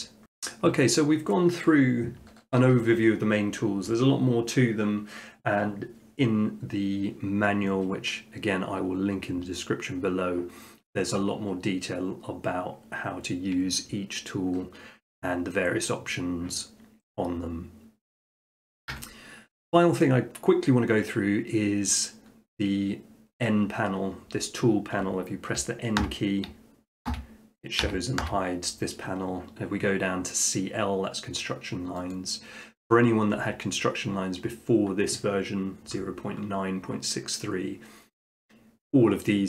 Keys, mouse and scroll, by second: 0.0 middle click, 18.4 click, 18.9 Tab, 26.0 n, 27.8 n, 28.2 n, 32.1-33.2 drag.